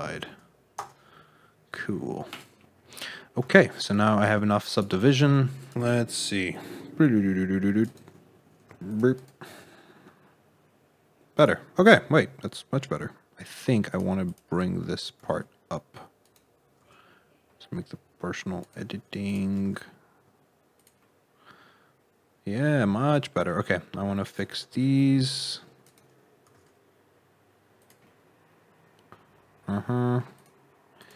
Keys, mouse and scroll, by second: 1.6-2.2 scroll up 3, 2.2 click, 2.5 middle click, 3.1-3.4 scroll up 2, 3.4 shift+middle click, 4.2 c, 5.5 click, 6.1 c, 8.6 c, 9.4 g, 11.9 middle click, 13.8 click, 14.2 click, 15.1 g, 16.7 g, 19.2 shift+click, 19.5 g, 20.9 middle click, 24.2 click, 24.6 c, 26.4 g, 28.0 middle click, 30.3 click, 30.9 click.